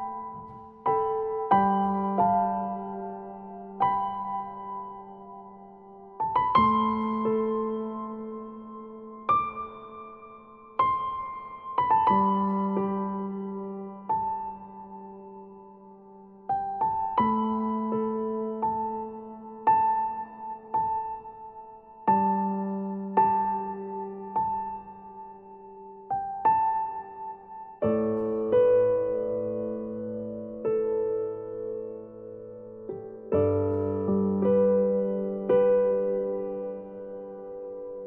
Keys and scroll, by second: 7.8 Delete, 15.2 Delete, 17.3 Delete, 18.9 ctrl+-, 37.1 ctrl+-, 37.5 ctrl+0.